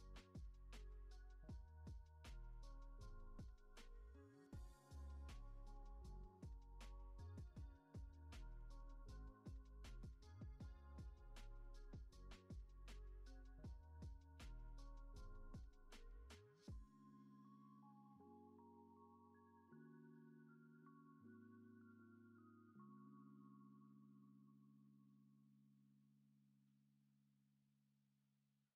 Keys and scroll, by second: 1.1 ctrl+c, 2.8 ctrl+c, 6.3 F9, 10.8 F9, 11.8 ctrl+s, 18.1 ctrl+c, 19.7 ctrl+c, 20.5 ctrl+v, 22.3 ctrl+v, 26.0 ctrl+c, 28.1 ctrl+c.